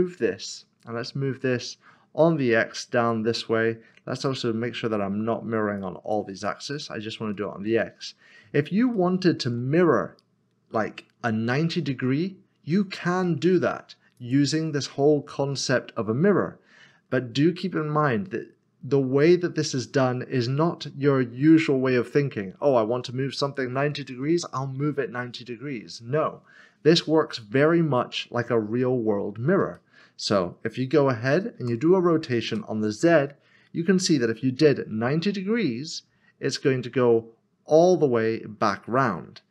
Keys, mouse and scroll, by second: 0.5 typing, 2.2 x, 5.5 click, 7.3 middle click, 8.9 shift+middle click, 14.2 click, 19.2 middle click, 29.2 middle click, 29.7 shift+middle click, 31.6-32.5 typing.